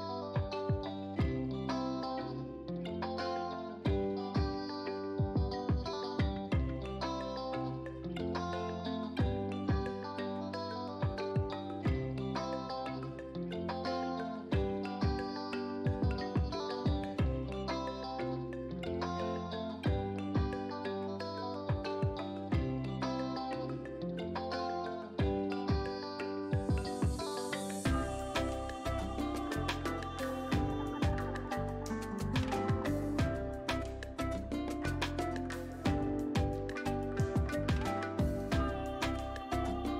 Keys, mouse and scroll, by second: 3.0 typing, 4.1-12.4 drag, 17.4 click, 22.1-25.9 drag, 26.6 click, 32.2 click, 33.8-35.6 scroll down 1, 36.7 click.